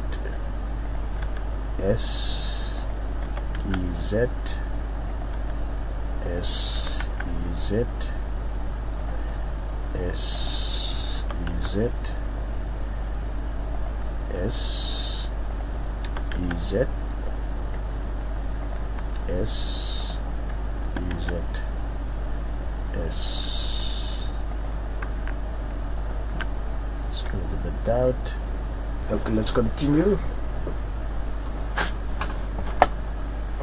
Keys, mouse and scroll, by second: 1.0 click, 1.2 s, 2.9 click, 3.2 e, 5.2 click, 5.4 s, 6.4 click, 6.7 e, 9.0 click, 9.3 s, 10.4 click, 11.2 e, 13.8 click, 14.3 s, 15.6 click, 16.0 e, 18.7 click, 19.0 s, 20.1 click, 20.8 e, 23.3 click, 23.6 s, 24.6 click, 26.0 alt+right click, 27.1 s, 28.1 click.